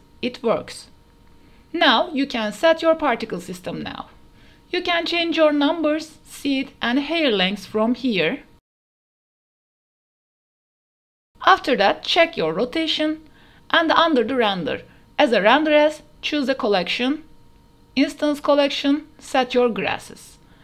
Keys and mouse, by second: 0.6 middle click, 1.9 shift+middle click, 2.2 middle click, 3.4 middle click, 3.9-7.3 middle drag, 7.8-9.1 drag, 9.6 middle click, 10.6 click, 12.0 click, 13.0 click, 14.1 click, 15.4-17.1 drag, 17.9 click, 19.5 click.